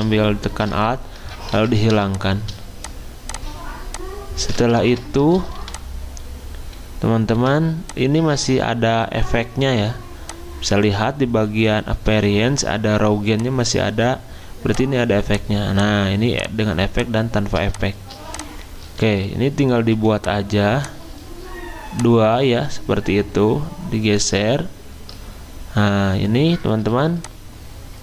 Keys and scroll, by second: 1.5 ctrl+3, 4.7 ctrl+z, 5.5 r, 7.3 v, 19.8 v.